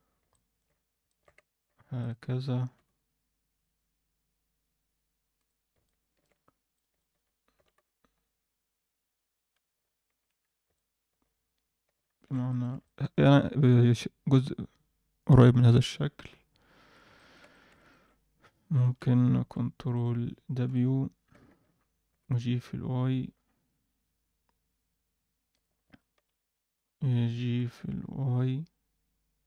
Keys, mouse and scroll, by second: 0.0-0.5 scroll down 2, 0.3 middle click, 0.7 scroll up 1, 1.0 shift+middle click, 1.4 ctrl+middle click, 2.0 click, 2.7 g, 5.6 scroll down 1, 5.8 middle click, 6.7 click, 6.9 alt+middle click, 7.5 g, 10.2-10.6 scroll down 2, 10.4 Tab, 10.7-11.9 middle drag, 12.1 alt+shift+middle drag, 12.4 ctrl+alt+middle drag, 12.8 middle click, 16.8 Tab, 17.1 middle click, 17.5 shift+middle click, 17.8 ctrl+alt+middle click, 18.4 click, 18.7 shift+click, 19.4 ctrl+w, 19.9 click, 20.6 h, 21.4 ctrl+z, 22.0 g, 25.7 scroll down 1, 25.9 middle click, 26.3-26.8 scroll up 1, 26.8 click, 27.5 g.